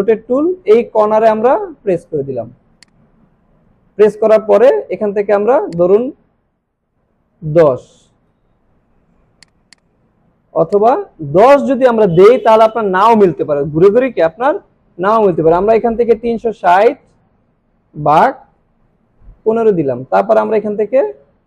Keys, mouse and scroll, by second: 2.8 alt+Num_Lock, 2.8 alt+click, 5.7 click, 9.5-11.3 drag.